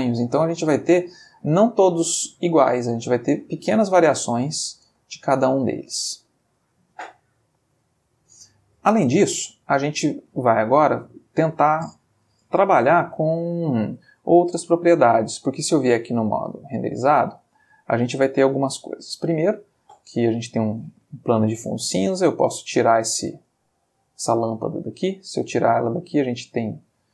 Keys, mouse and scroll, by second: 4.9 space, 8.2 middle click, 9.1 middle click, 10.5 middle click, 12.5-13.0 shift+middle drag, 14.5 space, 15.3 space, 16.5 click, 17.9-19.1 ctrl+middle drag, 22.6 click, 23.5-24.4 ctrl+middle drag, 24.4 ctrl+x, 24.9 ctrl+click, 25.6-26.7 ctrl+middle drag, 26.9-27.1 ctrl+middle drag.